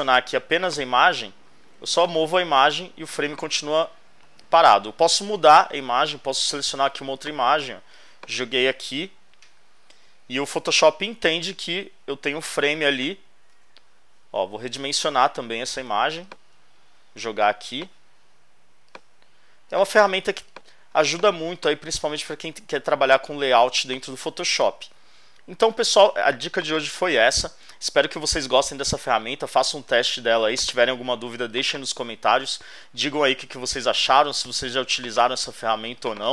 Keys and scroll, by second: 4.7 super+Tab, 13.5 super+t, 20.3 shift+space, 24.4 Return.